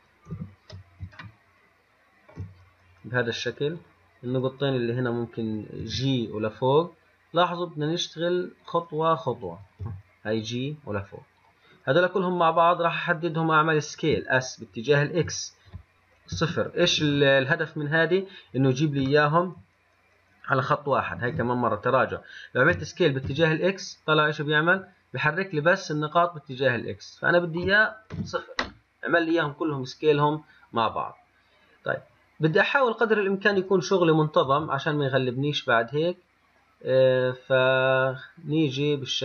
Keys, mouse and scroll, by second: 0.6 KP_1, 1.4-4.0 shift+middle drag, 4.0 click, 6.1 g, 9.9 click, 10.1 g, 12.2 click, 14.2 s, 18.5-21.4 scroll up 1, 21.4 ctrl+z, 23.0 s, 32.7 click, 34.7 g.